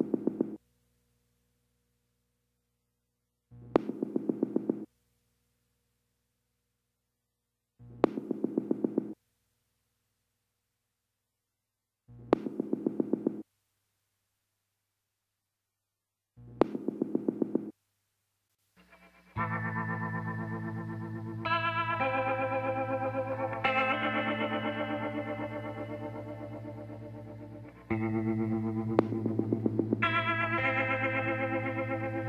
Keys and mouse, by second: 1.1-4.1 drag, 2.2 middle click, 3.9 middle click, 4.2 click, 4.5 KP_7, 7.2 click, 8.5 click, 8.8-10.4 middle drag, 10.8-12.6 middle drag, 13.8 alt+h, 14.6-18.9 middle drag, 21.2-23.1 drag, 22.9 middle click, 23.5-25.2 drag, 25.2 l, 25.8 l, 26.2 l, 26.8 l, 28.0 l, 28.8 l, 29.3 l, 31.0 l, 31.4 l, 32.0 l.